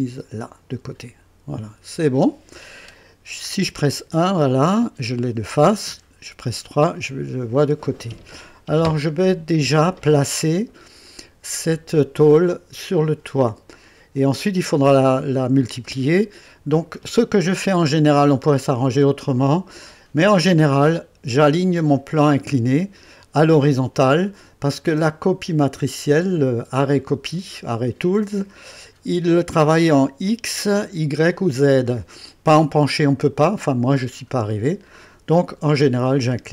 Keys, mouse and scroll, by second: 3.8 KP_1, 5.8 KP_3, 6.8-7.2 scroll up 1, 7.5 right click, 10.3 scroll up 1, 11.1 right click.